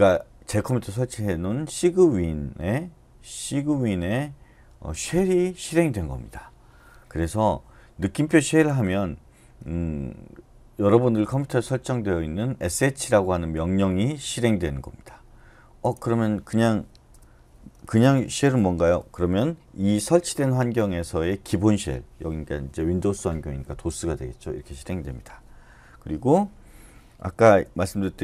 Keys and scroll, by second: 17.1 Return, 18.0-18.4 typing, 23.2-23.9 typing, 27.3-28.2 typing.